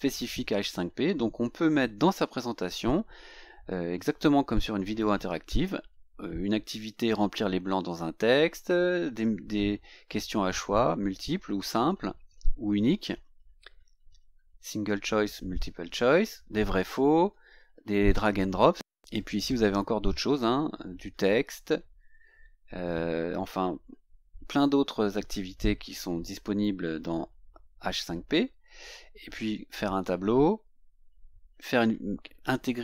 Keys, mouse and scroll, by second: 19.1 click.